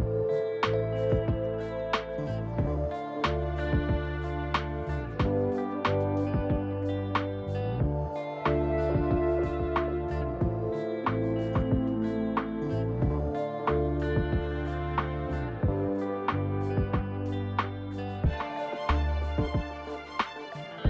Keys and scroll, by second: 0.7-1.5 typing, 8.4 Delete, 9.4 Delete, 9.7 ctrl+d, 10.9 Delete, 11.0 Delete, 12.1 ctrl+z, 16.9 ctrl+d.